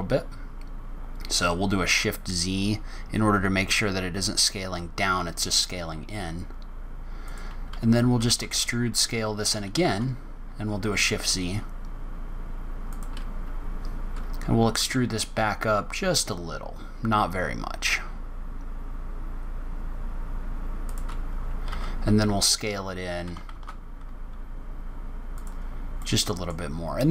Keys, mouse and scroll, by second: 25.9 middle click, 26.7-27.1 scroll down 2.